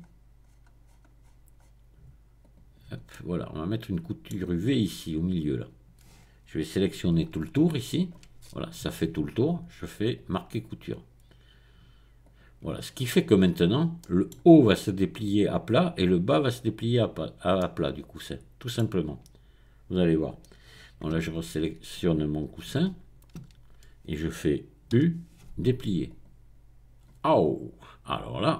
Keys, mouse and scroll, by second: 2.5 click, 3.1-4.7 middle drag, 7.1 alt+click, 10.1 right click, 12.2 click, 12.9-14.0 scroll down 1, 14.0 middle click, 17.6-18.9 middle drag, 19.5-20.0 scroll up 1, 20.0-20.9 scroll down 1, 21.2 Tab, 21.7 Tab, 22.8 a, 23.5 a, 24.9 u, 26.1 click.